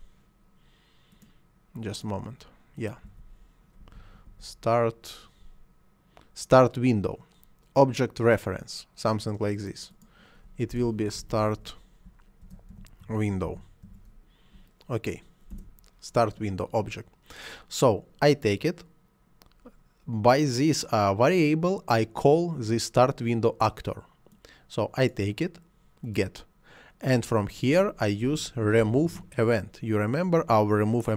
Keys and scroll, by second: 3.0 s, 3.8 t, 3.9 a, 4.2 r, 10.7-13.8 typing, 15.5 Return, 28.2 r, 28.8 m, 29.0 o.